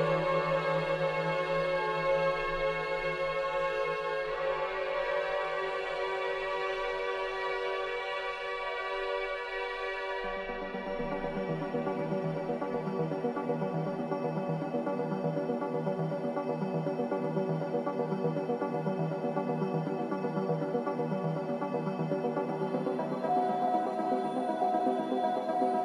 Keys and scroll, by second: 11.7 ctrl+d, 11.8 Escape, 20.4 4.